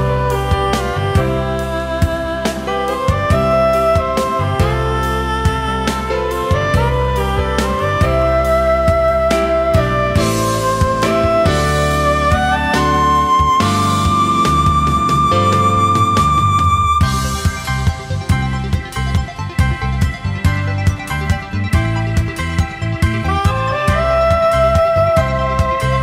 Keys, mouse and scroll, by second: 4.5 ctrl+shift+a, 4.9 alt+scroll down 1, 5.0 space, 8.0 alt+scroll up 1, 12.1 ctrl+shift+a, 12.6 alt+scroll down 1, 12.7 space, 13.4 alt+scroll up 1, 18.8 ctrl+shift+a, 19.2 alt+scroll down 1, 19.4 space, 20.2 alt+scroll up 1, 24.3 ctrl+shift+a, 24.7 space, 25.4 alt+scroll up 1, 25.8 space.